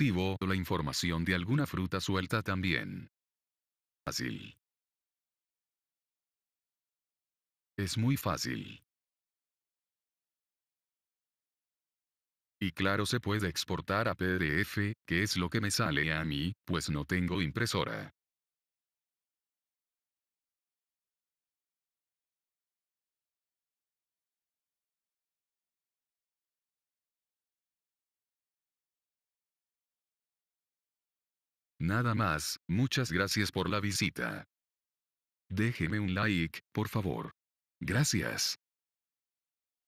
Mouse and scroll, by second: 0.2 click, 9.6 click, 13.7-14.8 drag, 15.1-16.1 drag, 18.6-19.7 drag, 21.0 click, 23.9-24.9 drag, 26.5-27.7 drag.